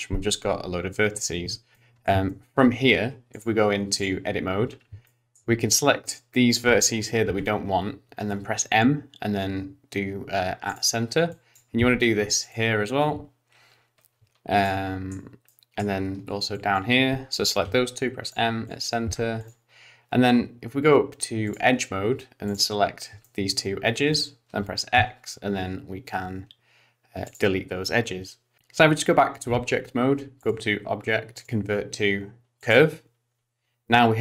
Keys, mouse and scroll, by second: 1.7 middle click, 2.3 shift+middle click, 3.3 click, 4.7-5.1 scroll up 3, 5.1 shift+middle click, 5.7 click, 7.3 m, 11.3 click, 11.8 m, 14.6 shift+middle click, 15.5 shift+middle click, 16.5 click, 17.6 m, 18.6 click, 19.1 m, 21.5 click, 22.5 click, 22.9-23.3 scroll down 3, 23.2 shift+middle click, 24.1 shift+click, 25.0 x, 28.6 Tab, 30.4 click.